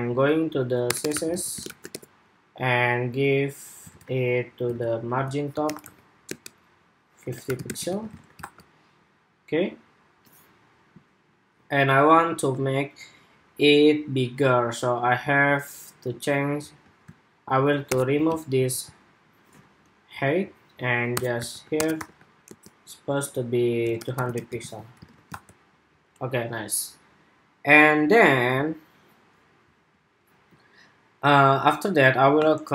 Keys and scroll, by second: 1.2 super+v, 3.7 super+Tab, 4.5 super+Tab, 7.8 super+s, 7.9 super+Tab, 8.2 super+r, 14.2 super+Tab, 18.6 super+s, 19.7 Escape, 24.5 super+s, 24.8 super+Tab, 25.1 super+r.